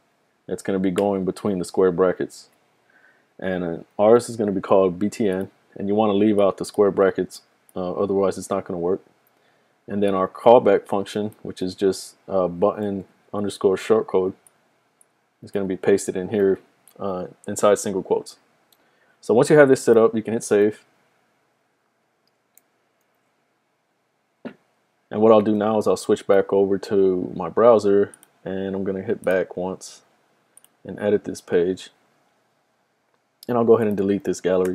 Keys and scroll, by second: 4.0-4.8 typing, 7.4 typing, 12.9 super+c, 15.9 super+c, 16.1 typing, 16.4 super+v, 20.6 super+s, 23.6 super+s, 25.6 super+Tab.